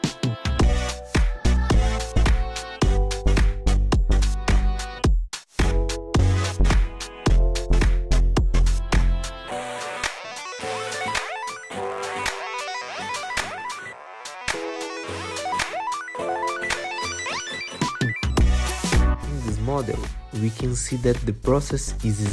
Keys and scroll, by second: 0.9 F4, 8.3 t, 8.4 z, 8.7 F4, 16.5 p, 17.9 alt+q, 18.8 F4.